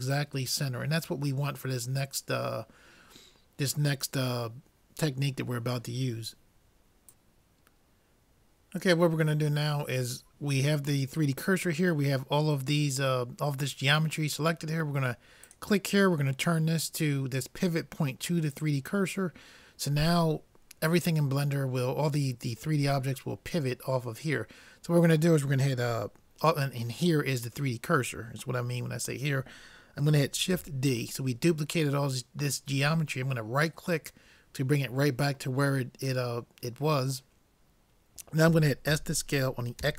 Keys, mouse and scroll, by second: 15.8-17.5 drag, 30.6 shift+d, 38.9 s.